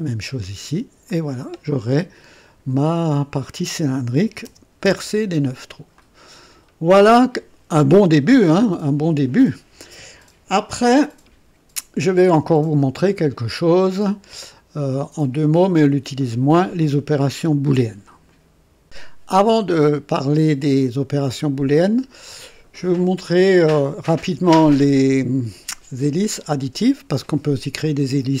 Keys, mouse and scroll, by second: 1.0 click, 3.1 click, 4.2-5.0 typing, 4.8 Return, 5.9-8.1 drag, 6.9-7.6 typing, 8.5-9.4 right drag, 10.5-11.3 typing, 18.2 right click, 18.8 click.